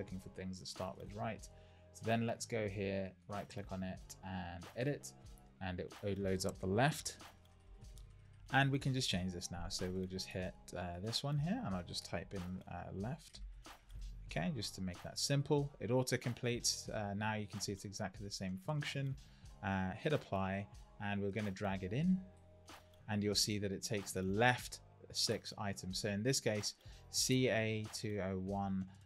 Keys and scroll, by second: 7.1 super+=, 13.3 shift+l.